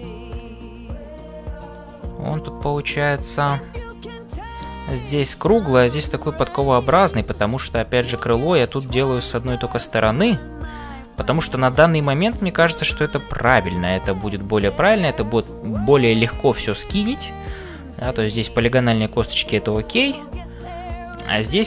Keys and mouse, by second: 0.0-21.6 typing, 0.4-4.8 middle drag, 5.7 middle click, 6.7 middle click, 8.4 shift+middle click, 9.1-16.0 middle drag, 17.0 ctrl+s, 20.0-21.6 middle drag.